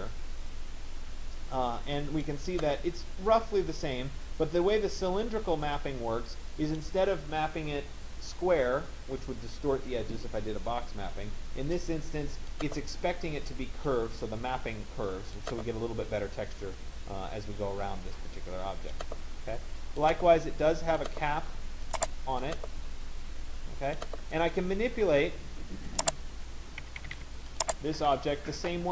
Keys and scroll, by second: 26.5 Escape.